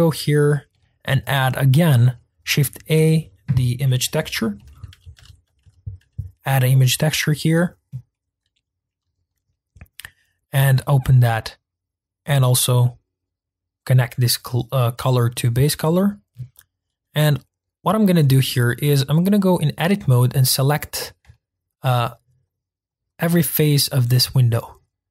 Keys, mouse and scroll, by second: 8.1-10.6 middle drag, 10.6-11.7 drag, 18.1 Tab, 18.9 click, 20.2 shift+click, 20.6 shift+click, 20.9 shift+click, 21.3 shift+middle click, 22.2 shift+click, 22.5 shift+click, 23.0 shift+click, 23.3 shift+click, 23.6 shift+click, 24.0 shift+click, 24.3 shift+click, 24.8 shift+click.